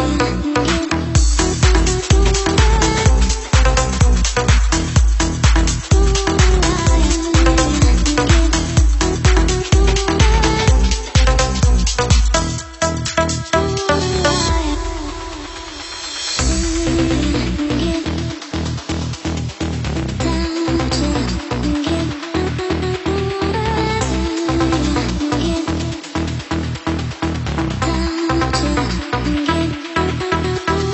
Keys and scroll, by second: 15.8 Up, 18.4 Up, 18.6 Down, 18.8 Down, 18.8 Down, 18.9 Down, 19.0 Up, 19.1 Down, 19.2 Down, 19.3 Down, 19.5 Down, 21.5-21.9 Down, 22.0 Down, 22.1 Down, 22.2 Down, 22.4 Down, 22.9 Down, 23.5 Down, 23.9 Down, 28.0 Up.